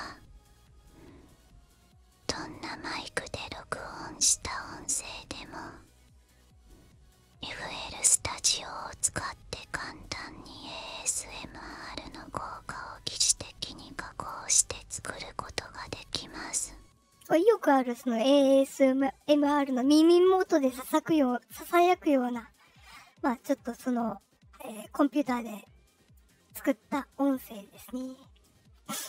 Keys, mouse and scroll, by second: 17.2 space, 24.8-26.1 drag, 26.9-29.0 drag.